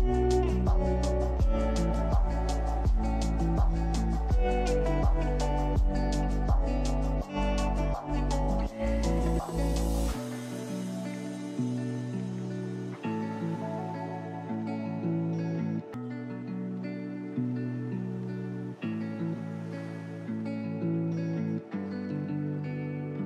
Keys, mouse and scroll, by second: 0.0-0.4 scroll up 2, 0.4 shift+middle click, 1.0 ctrl+z, 1.2 ctrl+z, 1.6 ctrl+z, 1.8 ctrl+z, 2.4 ctrl+z, 3.8-4.8 scroll down 4, 4.8 ctrl+shift+z, 5.3-5.7 scroll up 4, 5.7 shift+middle click, 6.1 scroll up 1, 6.3-7.8 middle drag, 8.4 ctrl+alt+click, 9.3 ctrl+z, 10.2 click, 10.8 click, 11.3 scroll up 2, 11.5 shift+middle click, 12.1 ctrl+click, 12.5-12.9 scroll down 1, 13.0 middle click, 14.0 click, 14.5-15.3 scroll up 4, 15.3 scroll down 1, 15.8 ctrl+b, 20.1 click, 20.3 Tab, 20.5 scroll down 4, 20.8-21.1 middle drag, 21.1-21.4 scroll up 3, 21.4-21.9 ctrl+middle drag, 21.9 click, 22.7 click.